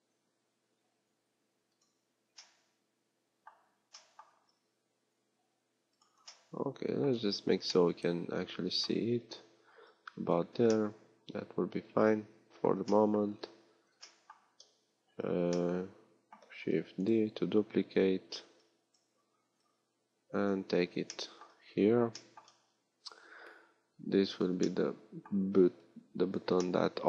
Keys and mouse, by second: 4.4 s, 16.6 shift+d.